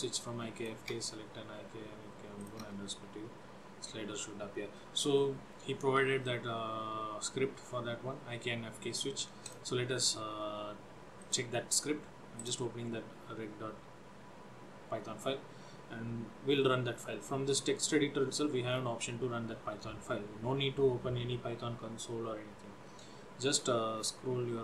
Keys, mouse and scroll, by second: 0.7 click, 0.9 Return, 2.5 click, 2.7 Return, 9.5 click, 9.9 scroll down 1, 11.3 click, 16.6-17.9 scroll down 10, 17.9-18.6 scroll up 8, 18.8-19.2 scroll down 2, 23.6-24.4 scroll down 7.